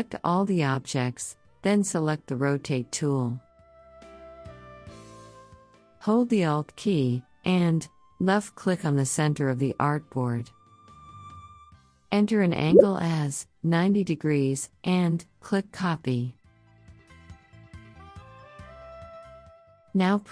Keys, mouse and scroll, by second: 2.9 right click, 4.1 click, 9.6 alt+click, 13.7 click, 16.4 click.